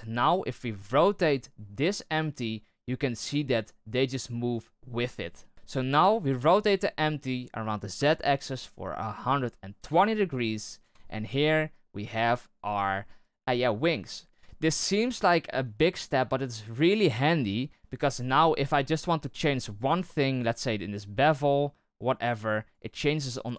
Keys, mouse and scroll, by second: 0.2 right click, 0.8 r, 4.7 middle click, 5.3 r, 5.5 KP_7, 6.3 r, 11.1 Tab, 11.8-12.5 middle drag, 12.5 right click, 13.2 right click, 18.6-18.9 middle drag, 18.9 scroll down 1, 19.2-20.2 middle drag, 20.2-22.5 drag, 23.4-23.5 drag.